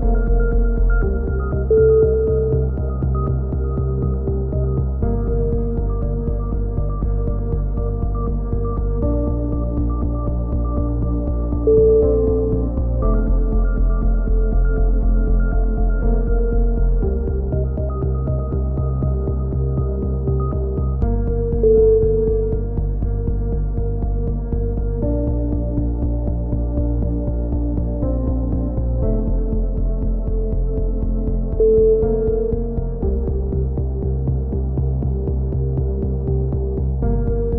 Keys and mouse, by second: 0.3-1.4 drag, 1.4 right click, 1.4 t, 2.7 click, 5.2 t, 5.5 a, 5.6 z, 6.0 Tab, 6.2 click, 9.0-12.2 typing, 10.0 Tab, 12.8 middle click, 14.5 KP_7, 14.9 z, 15.3 click, 17.1 click, 18.5 z, 18.9 a, 19.4 click, 20.1 middle click, 20.4 middle click, 23.0 middle click, 23.7 click, 23.7 right click, 24.3 z, 24.5 click, 25.4 KP_7, 27.3-30.9 middle drag, 30.9 click, 35.4 KP_7, 35.8 middle click, 36.8-37.5 middle drag.